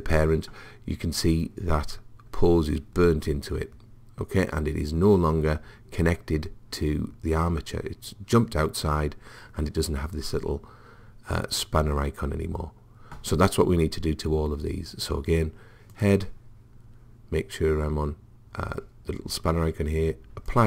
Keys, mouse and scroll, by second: 15.9 click, 20.5 click.